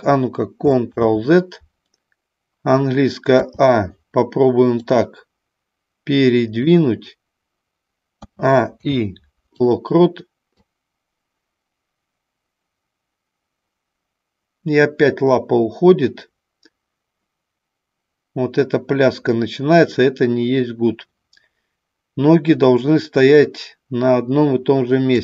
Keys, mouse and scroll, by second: 0.8 ctrl+z, 3.4 a, 4.7-6.6 drag, 8.1 a, 8.8 i, 10.6-25.1 drag.